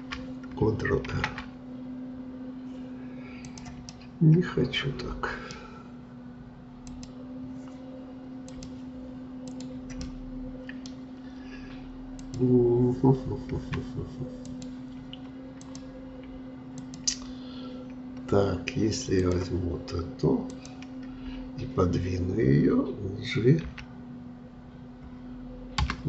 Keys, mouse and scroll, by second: 1.1 ctrl+r, 3.9-6.9 middle drag, 6.9 click, 8.5-10.0 drag, 10.0-12.2 middle drag, 12.2-23.5 drag, 23.7 g.